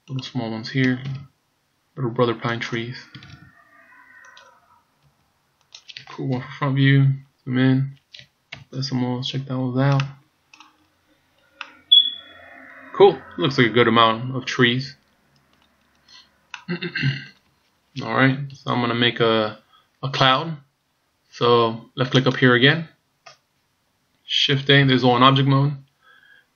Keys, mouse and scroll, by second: 0.3 right click, 1.1 shift+d, 3.4 shift+d, 5.1 r, 6.3 KP_1, 7.1-8.3 scroll up 3, 8.6 KP_Decimal, 9.4 scroll down 2, 10.1 middle click, 10.9-11.6 scroll down 5, 11.6 middle click, 15.8-16.5 scroll down 2, 16.5 middle click, 17.6 scroll down 1, 18.5 KP_1, 20.6-21.0 scroll down 2, 22.3 click, 24.6 shift+a.